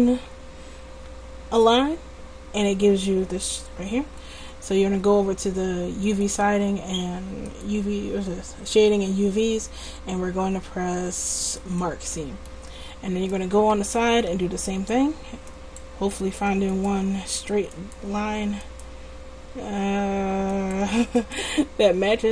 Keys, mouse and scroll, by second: 6.1-9.4 middle drag, 11.7 middle click, 12.6 click, 15.5-20.3 right drag, 20.5-22.3 middle drag.